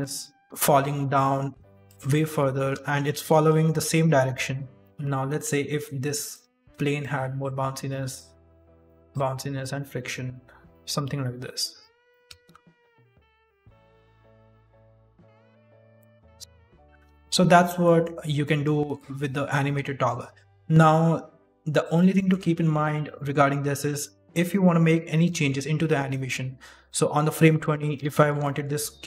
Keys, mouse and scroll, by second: 0.2 d, 0.4 right click, 0.4 s, 1.8 click, 2.1 middle click, 2.4 shift+middle click, 2.7 scroll up 1, 3.6 shift+space, 4.7 middle click, 4.8 middle click, 4.8 scroll down 2, 6.0 click, 6.2 click, 7.1 click, 8.0 right click, 8.8 click, 9.5 click, 10.6 right click, 10.6 click, 11.7 click, 12.0 middle click, 12.3 shift+space, 12.9 scroll down 1, 16.1 middle click, 16.4 right click, 16.4 shift+space, 16.4 KP_1, 16.9 KP_1, 17.7 middle click, 18.3 middle click, 20.0 click, 22.1 shift+middle click, 22.3-22.7 scroll up 2, 22.7 middle click, 26.7 click, 28.0 shift+middle click, 28.4 middle click.